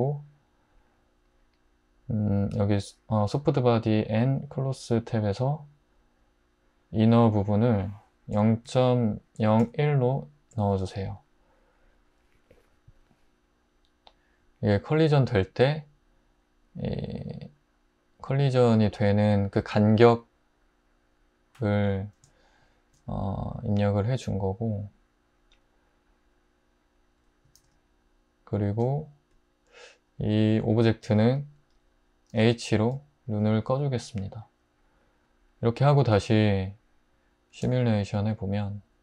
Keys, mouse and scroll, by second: 8.3-9.6 typing, 10.5 Return, 27.6 alt+z, 31.1 `, 32.3 h, 37.6 space.